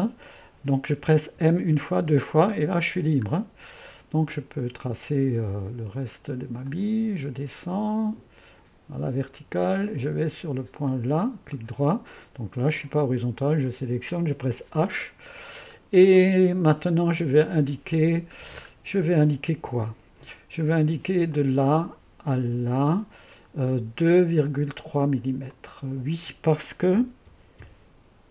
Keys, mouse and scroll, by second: 1.4 m, 2.0 m, 3.4-6.7 middle drag, 6.7 click, 9.3 click, 10.4 typing, 10.8 click, 11.5 middle click, 12.6-13.7 middle drag, 13.7-14.7 drag, 14.7 typing, 15.8 middle click, 16.2-18.3 drag, 18.5-19.0 scroll down 1, 18.7-19.5 typing, 21.3 click, 22.7-26.9 drag, 26.7-28.1 typing.